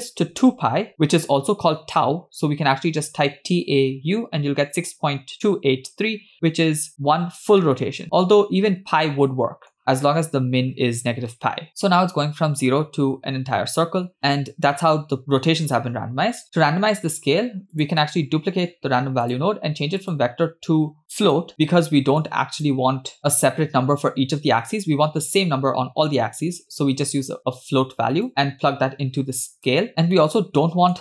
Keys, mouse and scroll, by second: 7.7-9.7 middle drag, 14.2-15.2 middle drag, 16.2-17.1 scroll down 1, 17.1 scroll down 1, 17.8 click, 18.5 shift+d, 20.0-21.4 drag, 22.2 click, 22.9 scroll up 1, 28.3-29.8 drag, 30.2-31.0 middle drag.